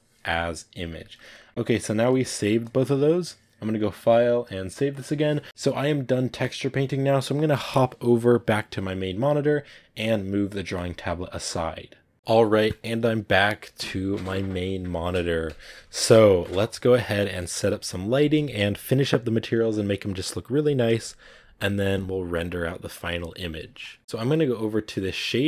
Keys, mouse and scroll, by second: 0.0-1.8 drag, 1.8-12.1 ctrl+middle drag, 17.1 scroll down 4, 17.3-21.0 middle drag.